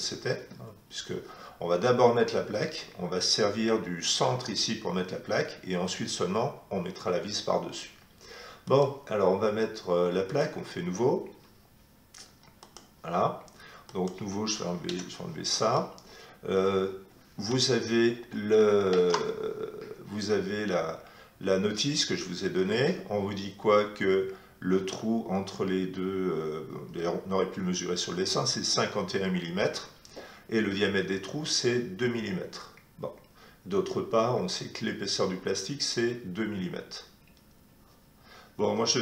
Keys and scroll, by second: 14.8 Delete, 18.3 alt+Tab.